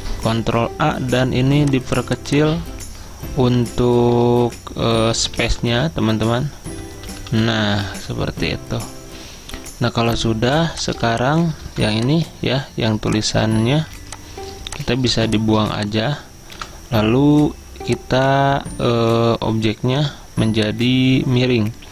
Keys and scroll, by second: 0.0 ctrl+a, 5.2 alt+Down, 10.6 typing.